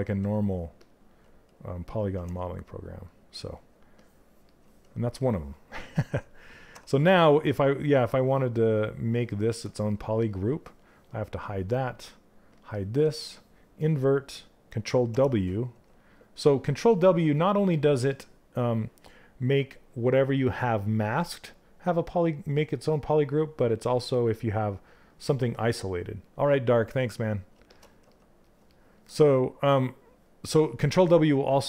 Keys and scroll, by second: 1.6 ctrl+w, 14.6 ctrl+w.